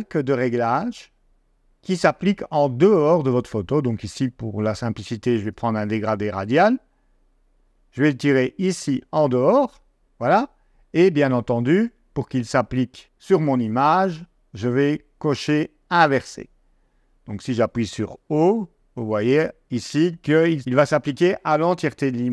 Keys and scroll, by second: 18.1 o.